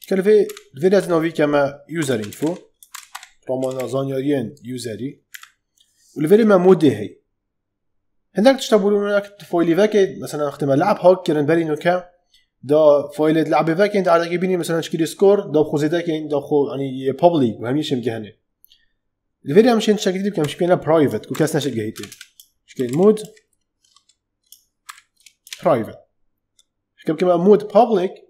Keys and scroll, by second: 0.4 shift+', 1.7-4.2 typing, 5.2 Right, 20.3-23.7 typing, 24.8 shift+p, 25.3 Return.